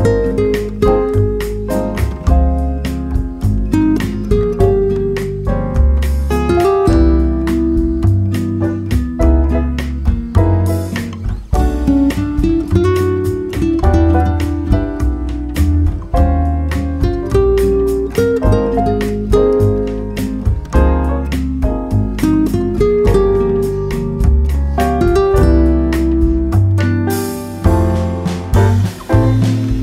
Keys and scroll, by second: 2.0 ctrl+c, 4.4 ctrl+v, 5.7 ctrl+v, 10.5 ctrl+v.